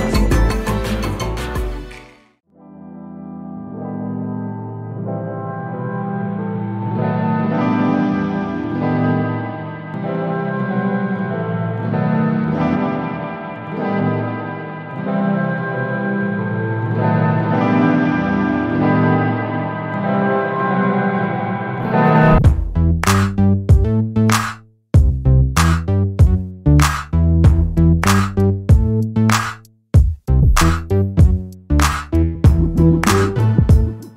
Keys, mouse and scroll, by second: 0.4-2.2 ctrl+shift+drag, 3.3 click, 5.6-8.4 ctrl+shift+drag, 8.8 ctrl+click, 10.5 Left, 12.0-13.4 ctrl+drag, 13.8 ctrl+d, 14.5 click, 15.5-17.9 ctrl+drag, 18.7 click, 20.5 shift+click, 21.3 shift+click, 22.6 ctrl+g, 23.7 KP_5, 27.2 click, 28.7-30.7 drag, 31.6 click, 33.9-34.1 drag.